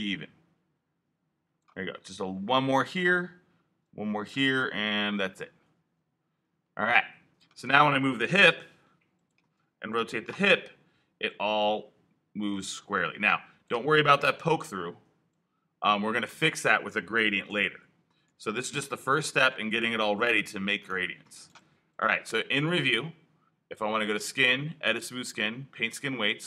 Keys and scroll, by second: 8.4 alt+q, 9.3 alt+q, 10.2 alt+e, 10.9 e, 14.1 3, 17.5 super+z, 19.3 alt+super+z.